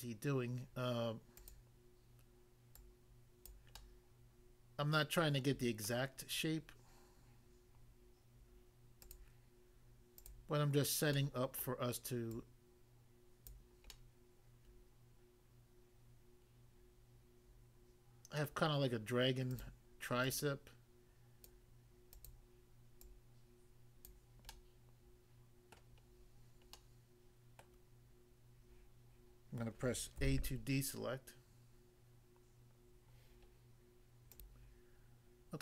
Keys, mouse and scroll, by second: 1.3 click, 1.5 click, 2.7 click, 3.5 click, 3.7 middle click, 5.8 middle click, 9.0 click, 9.1 click, 10.1 click, 10.3 click, 11.1 middle click, 11.6 middle click, 12.3 click, 13.5 click, 13.9 middle click, 18.5 middle click, 19.5 click, 20.3 click, 21.5 click, 22.1 click, 22.3 click, 23.1 click, 24.1 click, 24.5 middle click, 25.8 middle click, 26.0 scroll down 1, 26.7 middle click, 27.6 middle click, 30.2 a, 34.3 click, 34.5 click.